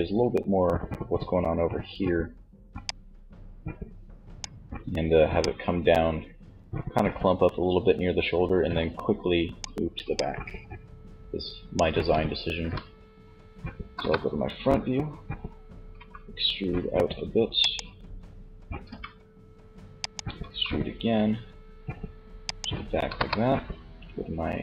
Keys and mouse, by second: 1.8 d, 4.4 d, 9.2 d, 9.3 click, 11.7 z, 13.0 KP_1, 15.1 e, 16.8-18.0 drag, 18.0 g, 19.6 e, 21.9 click, 22.3 KP_3.